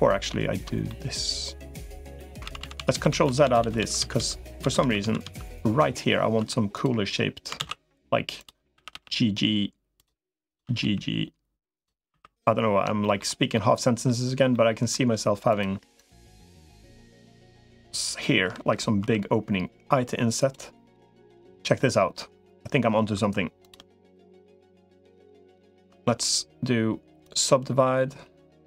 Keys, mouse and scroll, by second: 0.7-2.0 middle drag, 2.4 ctrl+z, 2.6 ctrl+z, 2.8 ctrl+z, 3.0 ctrl+z, 3.2 ctrl+z, 3.4 ctrl+z, 3.6 ctrl+z, 4.0 ctrl+z, 4.2 ctrl+z, 4.6 ctrl+z, 5.0 ctrl+z, 6.4 2, 7.4 ctrl+s, 8.2 click, 8.6 g, 10.6 g, 12.0 3, 12.8 shift+middle click, 13.3 middle click, 14.3 middle click, 16.4 shift+click, 20.8 |, 23.0 2, 23.4 click, 23.8 shift+click, 24.4 shift+click, 26.2-27.2 right drag.